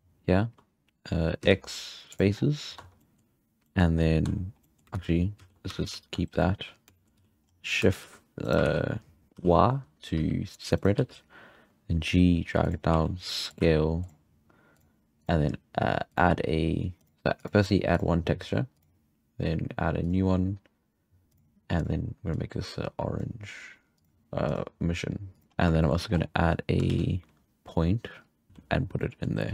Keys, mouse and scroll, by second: 0.0-0.6 scroll down 2, 0.6-1.4 scroll down 3, 1.4 x, 2.4-2.8 scroll up 2, 2.8 Tab, 3.0-3.5 middle drag, 3.5 scroll down 1, 3.6-4.0 shift+middle drag, 4.0 scroll up 2, 4.2 Tab, 4.6 middle click, 4.9 ctrl+z, 5.5 ctrl+z, 5.8 ctrl+z, 6.9 shift+middle drag, 7.1 z, 7.4-7.9 scroll up 4, 7.9 shift+d, 8.8 ctrl+z, 9.3 y, 10.1 g, 10.9 g, 12.9 s, 13.6 g, 14.7 click, 15.2 click, 15.5 g, 17.0 click, 17.9-18.8 drag, 19.5 click, 20.0-22.3 drag, 23.9-25.4 drag, 25.4 scroll up 2, 25.5-26.9 scroll down 11, 25.8 shift+middle drag, 26.9 shift+a, 28.3 scroll down 9, 28.5 z, 28.5 g, 29.0-29.5 middle drag.